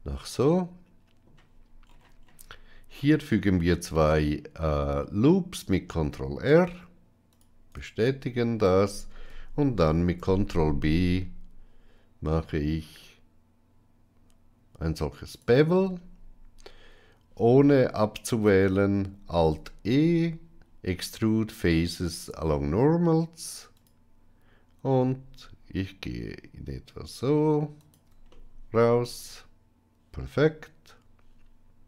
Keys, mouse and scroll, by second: 0.1-1.2 middle drag, 3.9 ctrl+r, 9.7 ctrl+b, 19.3 alt+e, 28.2-31.8 middle drag.